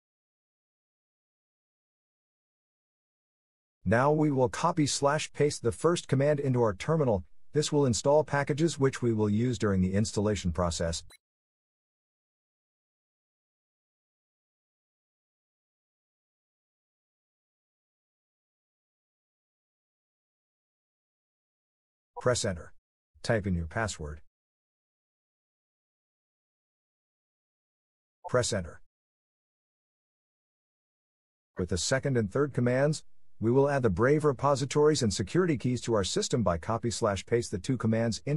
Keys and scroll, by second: 0.0 ctrl+alt+t, 22.9 Return, 24.1-25.8 typing, 29.0 Return.